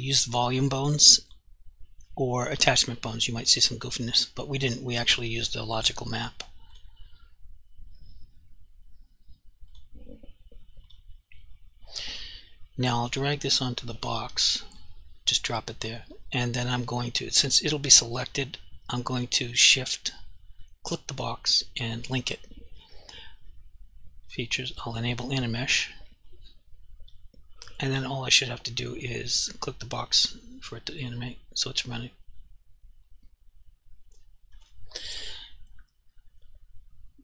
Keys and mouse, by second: 3.4 click, 4.9 click, 6.8 click, 9.7 click, 15.0 click, 19.6 shift+click, 26.4 alt+click, 29.1 click, 33.2 alt+click.